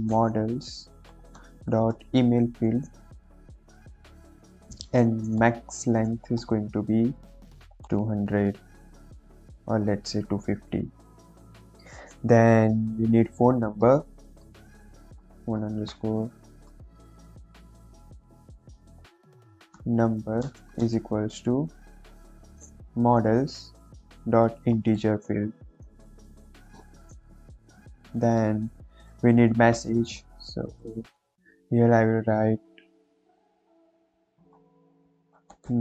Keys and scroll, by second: 1.0 l, 1.2 s, 1.3 ., 1.8 shift+e, 2.5 Return, 3.1 shift+9, 3.3 shift+0, 4.6 Left, 5.3 m, 6.1 Down, 6.3 Return, 7.7 2, 7.9 0, 9.3 Right, 9.6 Left, 9.7 Left, 10.3 BackSpace, 10.7 5, 10.8 Right, 11.0 Right, 11.4 Return, 13.9-16.3 typing, 18.0-20.7 typing, 22.8 m, 23.1 o, 23.7 Return, 24.1 ., 24.6 shift+i, 24.8 n, 25.6 Down, 26.3 Down, 26.6 Return, 27.4 shift+9, 27.4 shift+0, 29.0 Return, 29.9 m, 30.1 o, 30.5 BackSpace, 34.1-35.8 typing.